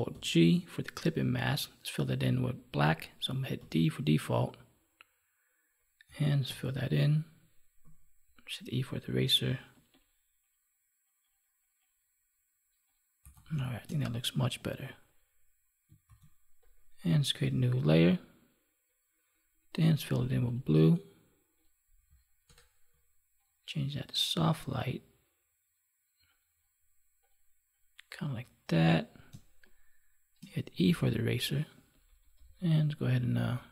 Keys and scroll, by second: 0.0 ctrl+alt+g, 6.3 alt+BackSpace, 13.5 space, 16.0 ctrl+s, 22.4 alt+BackSpace, 29.3 space.